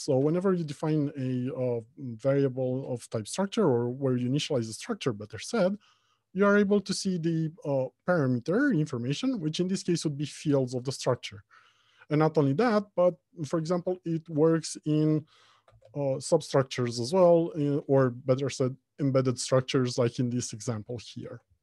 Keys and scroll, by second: 16.0 ctrl+p.